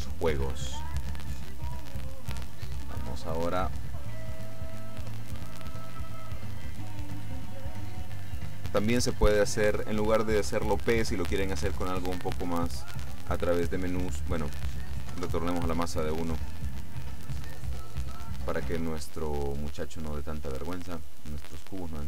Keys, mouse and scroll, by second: 1.3 click, 4.5 click, 7.7 click, 13.0 Escape, 14.2 click, 15.2 KP_1, 15.5 KP_Enter, 21.3 click.